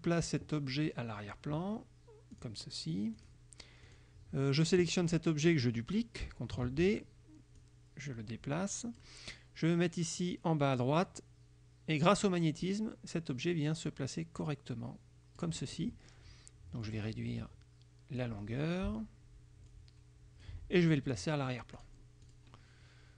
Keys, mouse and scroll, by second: 2.4 click, 3.3 click, 3.9 click, 6.8 ctrl+d, 7.6-9.3 drag, 10.8-15.7 drag, 16.9-18.5 drag, 19.8 click, 21.8 click, 22.3 click.